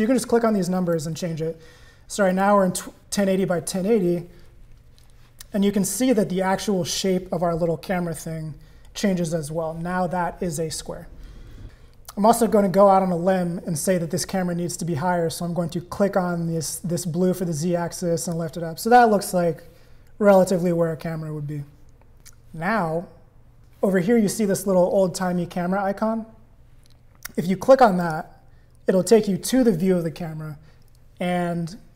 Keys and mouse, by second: 1.0 0, 15.7-18.3 drag, 28.0 click.